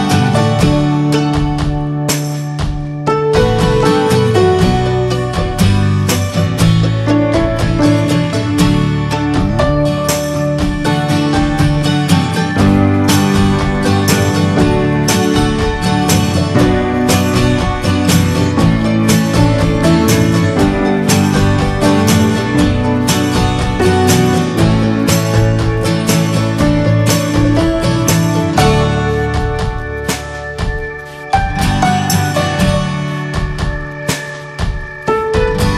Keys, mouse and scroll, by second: 16.9-19.6 scroll up 1, 19.6-23.5 scroll up 1, 24.0-29.5 shift+middle drag, 29.5-32.1 drag, 32.1-34.7 right drag, 34.7-35.7 drag.